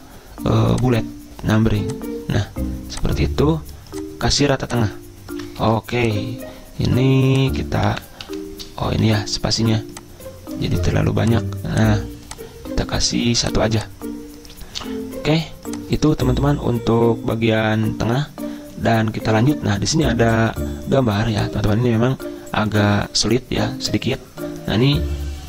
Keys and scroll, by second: 5.7 ctrl+e, 7.9 Delete, 8.3 Delete, 9.1 ctrl+z, 16.5 Return.